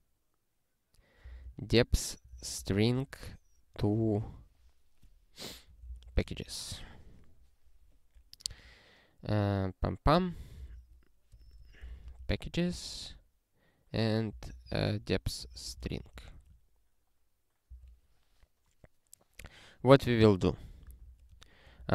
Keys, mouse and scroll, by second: 1.0-4.0 typing, 5.3-6.7 typing, 8.5 space, 10.1-12.8 typing, 14.1-16.2 typing, 17.7 Return, 20.8 Return, 21.0 ctrl+p, 21.3 Tab, 21.7 (.